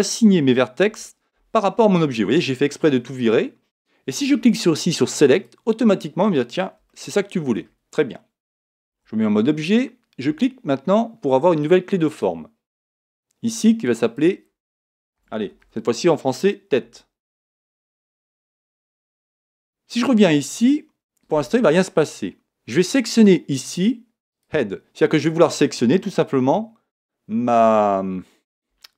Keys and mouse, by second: 0.2 click, 0.9 a, 5.3 click, 6.9-8.9 middle drag, 8.9 Tab, 12.1-16.0 drag, 23.2 click.